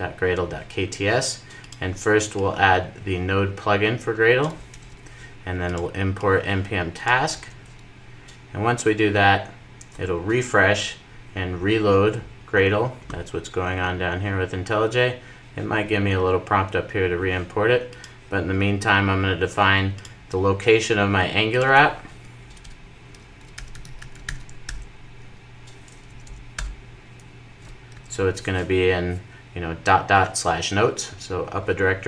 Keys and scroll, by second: 4.9 super+v, 7.9 super+v, 7.9 super+s, 24.7 super+j, 26.4 Return, 28.0 super+s.